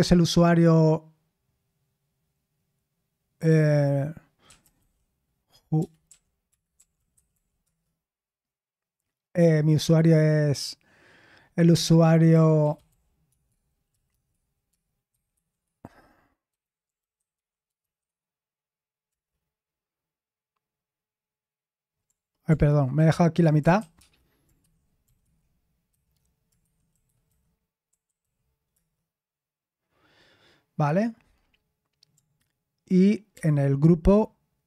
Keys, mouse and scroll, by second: 4.2-7.8 typing, 12.0-13.3 typing, 15.1-19.0 typing, 22.6 ctrl+c, 22.9 ctrl+p, 23.7-28.7 typing, 33.3 ctrl+p.